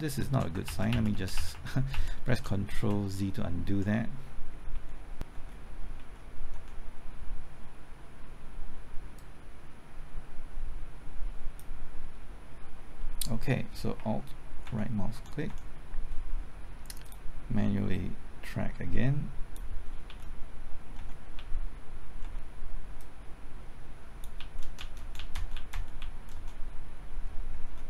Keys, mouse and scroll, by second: 0.0-0.5 typing, 0.1 ctrl+z, 0.6 ctrl+z, 0.9 ctrl+z, 1.1 ctrl+z, 1.3 ctrl+z, 1.5 ctrl+z, 1.9 ctrl+z, 2.2 ctrl+z, 2.7 ctrl+z, 4.7 Left, 5.3-6.5 typing, 9.2-11.9 drag, 14.0 typing, 14.7 alt+Right, 15.2 alt+Right, 15.2-15.5 typing, 17.1-19.9 drag, 20.1 Left, 21.0-22.2 typing, 23.0 click, 24.4 Left, 24.6-25.4 typing, 25.6 Left, 25.7 Right, 26.0 Left, 26.3 Right, 27.3-27.8 typing.